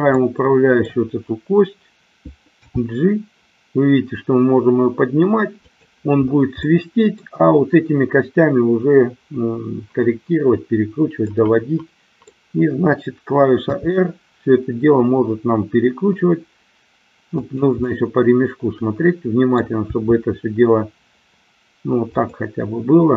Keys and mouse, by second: 0.2-1.0 middle drag, 2.6 g, 5.7 click, 6.6-7.4 middle drag, 11.4-12.4 middle drag, 13.7 r, 17.5 drag, 18.0-19.7 middle drag, 20.0 r.